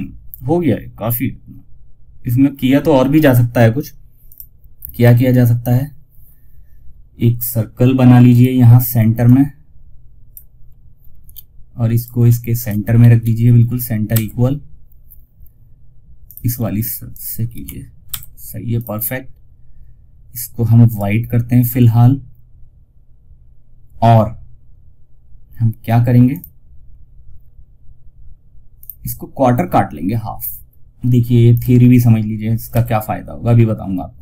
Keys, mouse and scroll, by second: 3.6 click, 4.3 F2, 4.6-11.2 drag, 11.8 shift+click, 12.0-13.0 typing, 15.6 click, 16.5-17.3 typing, 18.1 click, 25.6 click, 30.8 click.